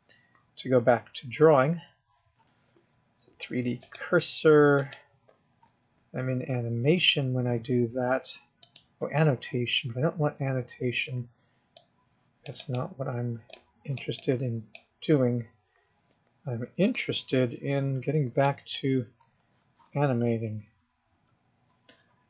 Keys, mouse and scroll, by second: 4.2 click, 9.0 click, 12.1 click, 13.0 click, 13.3-13.9 scroll down 1, 13.9 click, 14.6 click, 15.4 scroll down 2, 15.7 scroll up 5, 16.3-17.0 scroll down 2, 19.8 click, 20.7 KP_0, 21.5 KP_0.